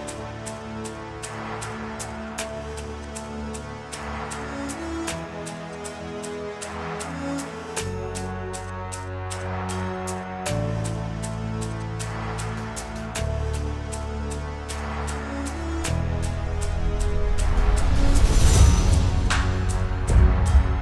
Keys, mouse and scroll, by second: 0.1-3.6 drag, 8.9 click, 9.4 click, 9.6 click, 17.8 click, 17.9 ctrl+z.